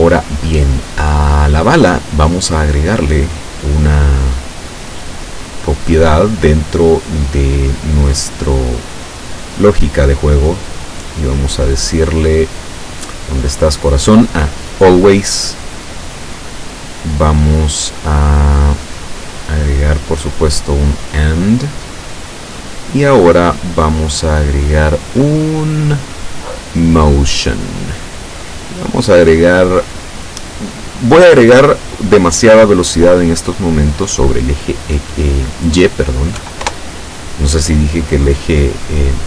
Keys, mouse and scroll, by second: 3.3 click, 5.4 click, 10.9 click, 14.9 click, 20.2 click, 20.8 click, 22.2-23.3 drag, 23.9 click, 26.6 click, 29.3 click, 36.4 KP_5, 36.7 KP_Enter.